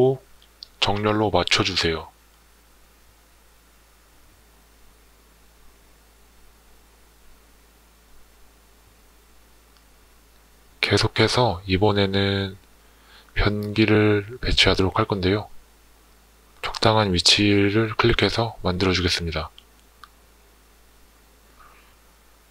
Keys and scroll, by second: 1.1 Tab, 5.5 Tab, 21.4 Escape.